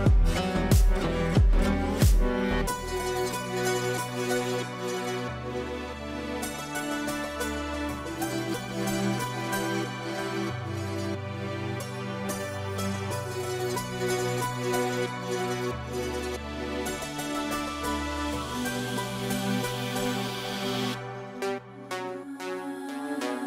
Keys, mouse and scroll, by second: 0.0-0.4 typing, 0.5 ctrl+space, 2.2 click, 6.1-11.8 shift+drag, 11.8 ctrl+right click, 12.2 click, 13.4 ctrl+a, 15.1-18.1 typing, 19.8-20.6 typing, 22.0-23.1 typing.